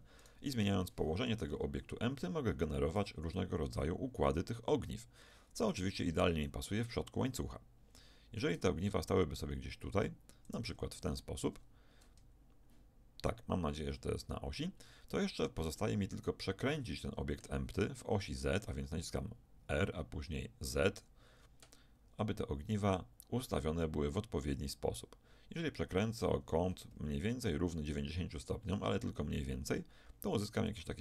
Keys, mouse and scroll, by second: 0.2-2.4 drag, 1.4 KP_1, 3.0 g, 11.1-13.2 middle drag, 11.1-12.2 scroll up 1, 18.2 r.